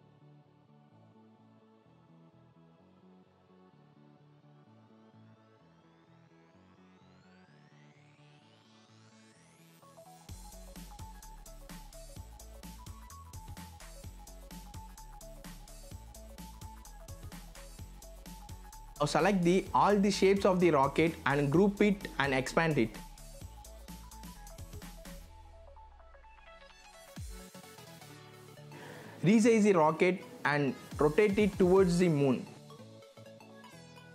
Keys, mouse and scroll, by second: 1.8 shift+click, 2.5 click, 3.0-3.8 scroll down 1, 4.0-6.4 drag, 9.5 shift+click, 10.5 shift+v, 10.6-13.1 drag, 17.6 right click, 19.0-27.6 drag, 28.1 shift+click, 30.0-32.9 drag, 33.2 z, 33.3 click.